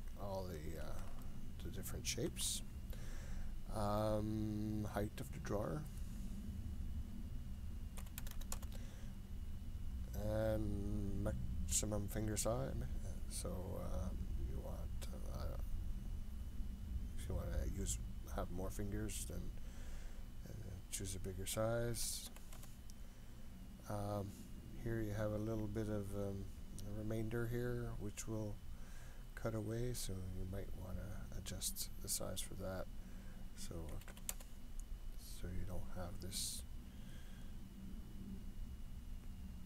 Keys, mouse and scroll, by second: 1.2-2.4 shift+middle drag, 5.7-9.5 drag, 8.3 KP_0, 11.9-23.5 drag, 24.1-24.7 scroll up 2, 24.7-25.4 scroll up 2, 25.4-27.0 scroll down 1, 27.0-28.3 scroll down 1, 28.3-28.7 scroll down 1, 30.1-36.6 drag, 37.1-39.6 drag.